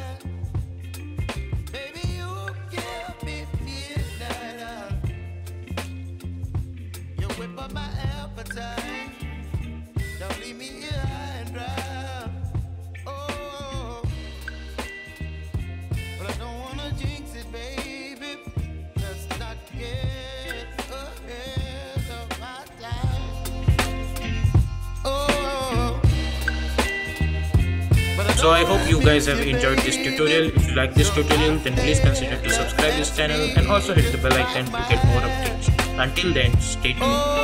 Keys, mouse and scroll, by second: 0.8-7.0 drag, 7.0 t, 7.8 click, 12.7 space, 18.6 space, 19.0-21.5 drag, 21.5 n.